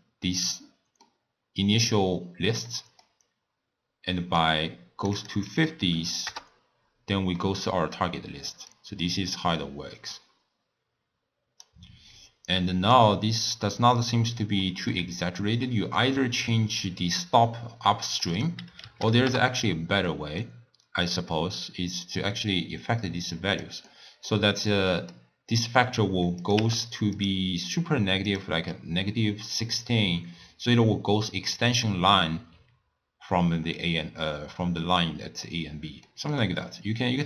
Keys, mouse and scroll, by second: 4.4-7.3 drag, 7.3-8.7 middle drag, 8.7-11.8 drag, 13.5-14.7 drag, 14.7-16.8 middle drag, 16.8-20.1 drag, 20.1-22.0 middle drag, 22.0-23.9 drag, 23.9-24.5 middle drag, 24.5-24.9 scroll down 1, 24.9-26.4 middle drag, 26.4 click, 26.6 w, 31.8-32.5 d, 35.0 d, 36.1-37.2 middle drag.